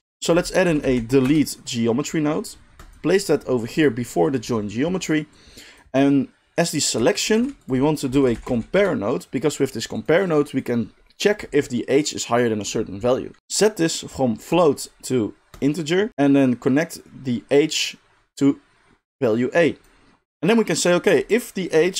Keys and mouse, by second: 0.0 shift+a, 2.9 middle click, 3.3-10.0 drag, 7.3 shift+a, 10.0 middle drag, 10.2-21.9 drag.